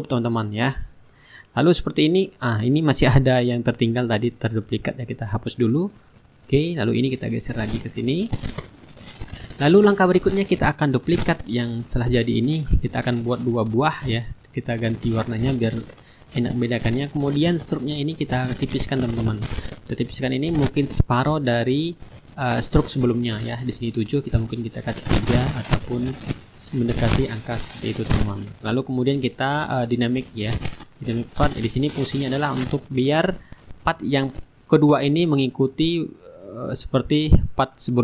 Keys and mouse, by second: 1.7-4.2 drag, 4.3-5.4 right drag, 5.8-9.8 drag, 6.3-9.8 right drag, 10.0 middle click, 11.0 click, 12.1-13.3 right drag, 13.3 click, 14.8 shift+click, 17.8 click, 20.0 click, 22.6 click, 24.1 KP_3, 24.5 Return, 27.2 click, 29.5 click, 31.0-34.0 drag, 34.2 click, 36.6 shift+click.